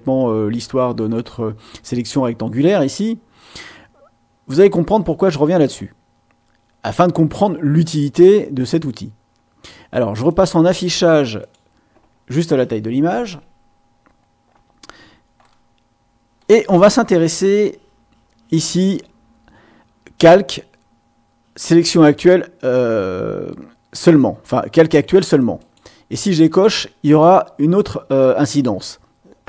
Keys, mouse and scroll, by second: 10.3 click, 11.4 click, 13.7-14.3 ctrl+scroll up 2, 15.4-16.5 middle drag, 16.5 click, 25.5 click.